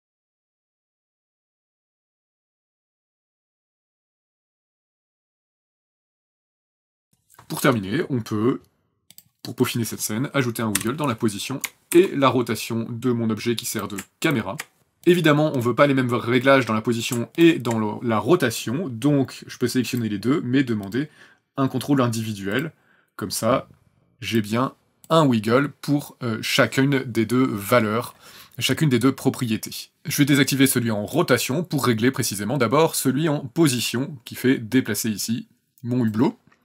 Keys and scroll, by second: 0.0-1.7 typing, 0.2 KP_Enter, 1.0 KP_Enter, 1.7 KP_Enter, 6.9 space, 7.1 ctrl+s, 10.7 p, 11.9 shift+r, 14.8 ctrl+z.